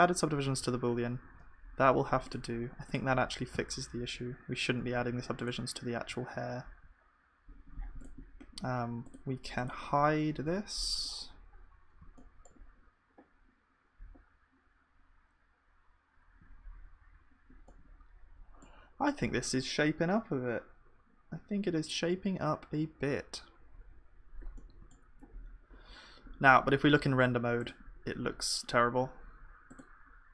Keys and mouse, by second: 0.7 ctrl+d, 1.2 ctrl+s, 3.6 z, 4.8 z, 6.3 z, 11.0-12.2 right drag, 12.2-17.3 middle drag, 17.7-27.4 middle drag, 29.7-30.3 drag.